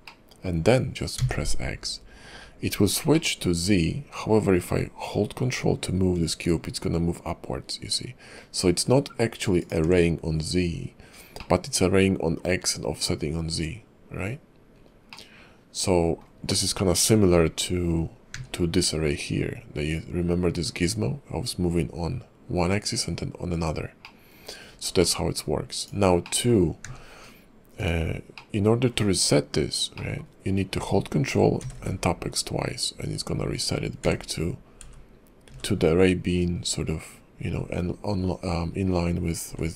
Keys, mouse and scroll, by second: 0.1 middle click, 3.1 middle click, 11.4 middle click, 14.7 scroll down 4, 15.1 middle click, 16.4-16.8 scroll up 1, 16.8-17.2 scroll down 1, 17.2-18.3 scroll up 1, 18.3 q, 24.0 middle click, 24.6-25.0 scroll up 3, 25.0 middle click, 25.8 click, 26.2 middle click, 26.8 q, 28.3 middle click, 30.0 middle click.